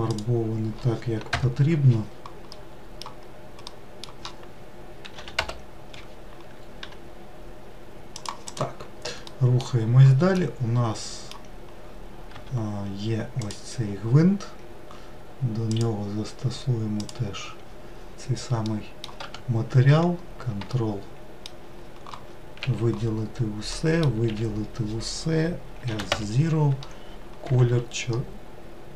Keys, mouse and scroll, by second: 1.1 ctrl+KP_Add, 4.8 s, 8.3 click, 9.0 middle click, 9.5-10.0 scroll down 1, 10.2-12.0 middle drag, 12.0 Tab, 13.2 click, 16.8-18.4 drag, 18.4 middle click, 19.0 Tab, 19.7-20.3 scroll up 2, 20.5-22.3 shift+middle drag, 22.3 a, 25.5 s.